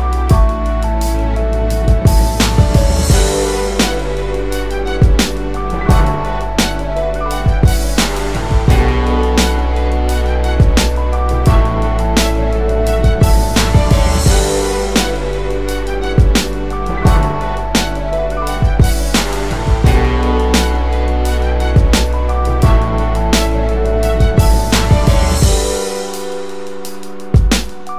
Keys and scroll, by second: 0.9-1.6 space, 1.9-3.2 space, 4.6-5.1 typing, 16.7-17.6 typing.